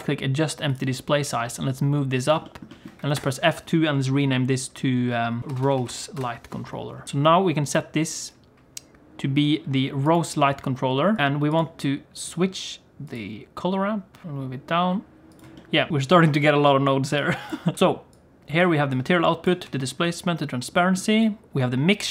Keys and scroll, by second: 1.2 g, 3.1 F2, 5.4 shift+l, 14.2 g, 17.6 g.